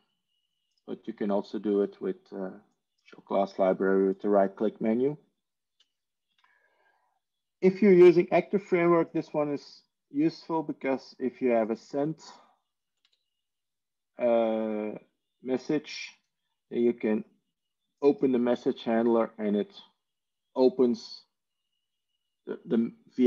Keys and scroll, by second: 13.5 Tab, 15.6 Tab.